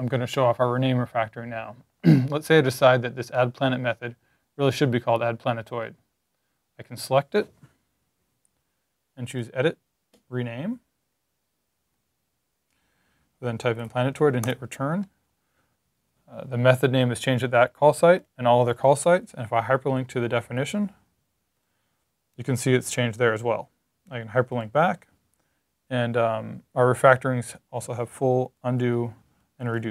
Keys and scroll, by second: 12.5 Right, 13.4-14.2 typing, 28.7 super+z, 29.5 shift+super+z.